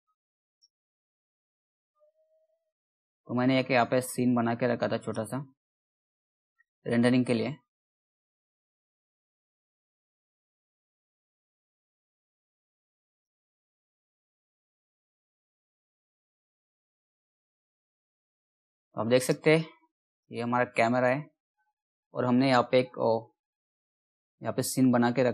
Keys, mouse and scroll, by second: 0.6-1.2 scroll down 1, 1.2 click, 1.2-4.9 drag, 4.9-6.4 scroll up 1, 6.4 scroll down 1, 6.6-7.2 scroll up 1, 9.3-13.2 drag, 13.2 scroll up 1, 14.0-14.6 scroll down 1, 14.6 middle click, 15.5-16.2 scroll down 1, 17.3 c, 18.7 click, 20.4 F3, 25.2 click.